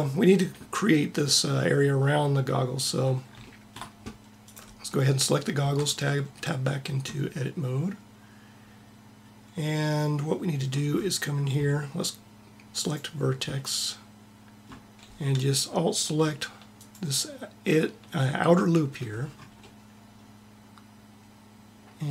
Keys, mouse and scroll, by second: 5.3 Tab, 12.5 click.